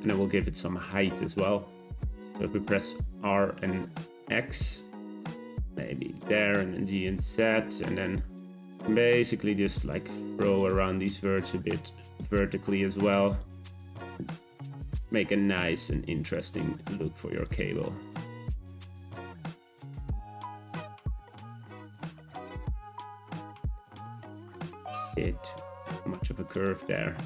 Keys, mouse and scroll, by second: 2.4 a, 3.2 r, 6.3 g, 8.2 click, 8.5 g, 9.7 click, 10.0 g, 11.0 click, 11.3 g, 12.5 click, 12.8 g, 13.7 click, 13.9 g, 14.9 click, 15.2 g, 16.3 click, 16.8 g, 18.0 click, 18.3 g, 19.3 click, 19.6 g, 20.8 click, 21.0 g, 22.0 click, 22.3 g, 23.8 click, 24.1 g, 25.0 click, 25.3 g, 26.8 click, 27.1 Tab.